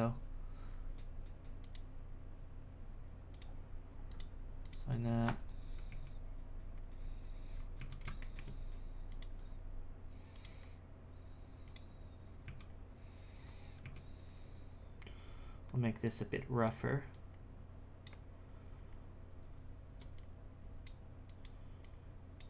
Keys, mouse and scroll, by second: 1.6-5.4 drag, 5.4-5.9 scroll down 2, 5.9 z, 6.2-7.1 scroll down 1, 7.1-7.5 scroll down 7, 7.5 scroll up 1, 7.8 z, 8.2 shift+middle click, 9.1 click, 12.4 z, 12.9-13.4 scroll down 2, 13.4-13.8 scroll up 3, 13.8 z, 16.0-18.4 drag, 18.4-19.5 scroll down 3, 19.5-20.1 scroll down 3, 20.1-21.4 drag, 21.8-22.4 drag.